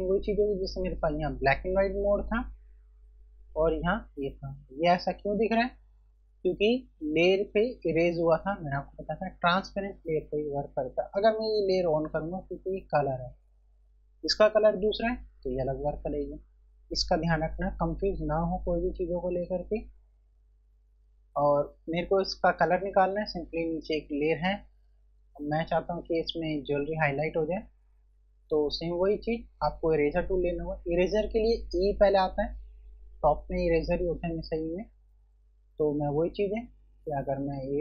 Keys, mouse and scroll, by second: 1.3 click, 4.9 click, 11.8 click, 13.9 click, 16.1 click, 24.9 scroll up 1, 31.8 e, 35.2 scroll up 1, 36.7 typing.